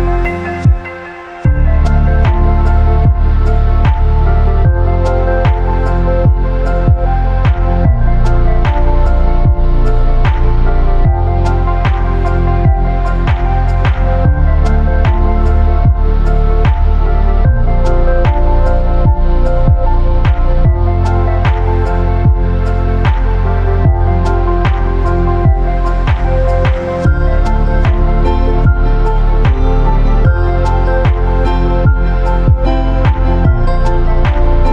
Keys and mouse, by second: 0.6 shift+click, 1.7 b, 2.6-3.6 drag, 3.7 b, 4.6 click, 7.1 shift+click, 7.7 shift+click, 8.0 a, 8.3 ctrl+r, 10.7 shift+drag, 11.3 ctrl+b, 17.4-20.8 drag, 21.2 a, 21.5 b, 23.7 ctrl+r, 25.0 a, 25.3 b, 26.4 ctrl+r, 27.8 a, 28.1 b, 29.4 click, 30.2 b, 31.3-32.5 drag, 32.7 b, 33.7 click, 34.5 b.